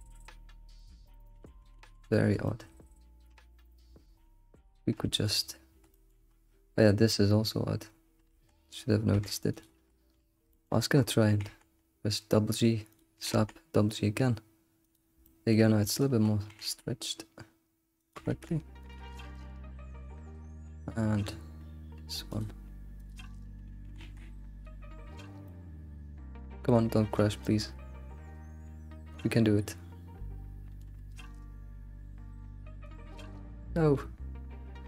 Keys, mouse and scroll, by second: 0.0 alt+shift+z, 0.8 click, 1.1 middle click, 1.4 alt+shift+z, 1.8 alt+shift+z, 2.1-5.2 shift+middle drag, 4.2 alt+shift+z, 5.4 alt+middle drag, 6.0 shift+middle drag, 6.3-6.6 scroll up 4, 7.2 scroll down 2, 8.4 Tab, 9.1 Tab, 9.5 alt+click, 10.0-10.4 scroll down 9, 10.5 shift+middle click, 10.7-11.3 scroll up 10, 11.3 g, 13.2 g, 15.2 shift+middle click, 15.9 alt+click, 16.5 g, 18.1 g, 19.0 g, 23.2 click.